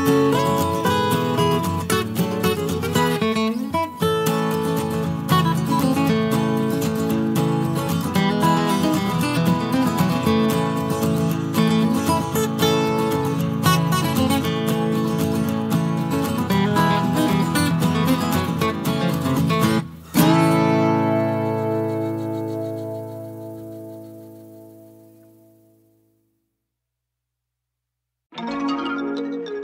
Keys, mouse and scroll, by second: 3.8 ctrl+z, 5.0-6.2 drag, 7.5-13.0 drag, 13.7 space, 14.0 click, 15.3 KP_Subtract, 17.7-28.6 drag.